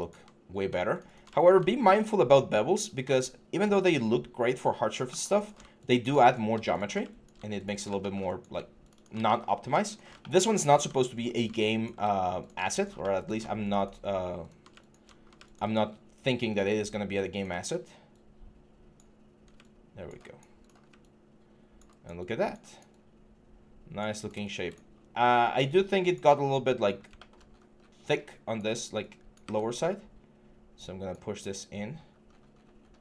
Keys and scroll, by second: 28.4 4, 29.2 w, 31.2 6.